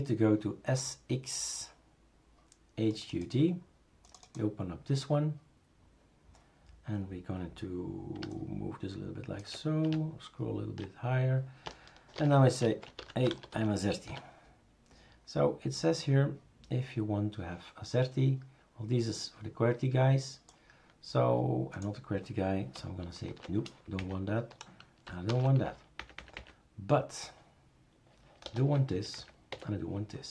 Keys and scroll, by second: 12.2 ctrl+f, 12.4-14.1 typing, 23.3-24.2 typing, 24.0 Down, 25.3 #, 26.0 Down, 26.2 Down, 26.4 Down, 28.4 BackSpace, 28.9 Down, 29.2 Down, 29.5 Delete.